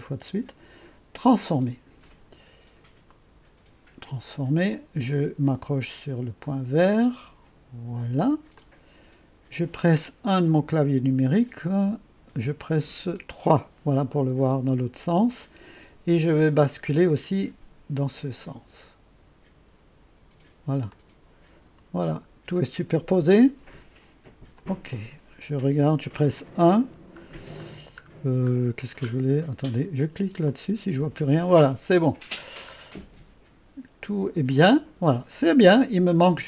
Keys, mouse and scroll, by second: 1.3 click, 4.8-8.2 drag, 8.7-9.7 drag, 11.1 typing, 13.1 typing, 17.2-20.6 drag, 21.0-22.9 drag, 24.6 click, 25.9 1, 30.5 click, 33.0 click, 33.3 right click.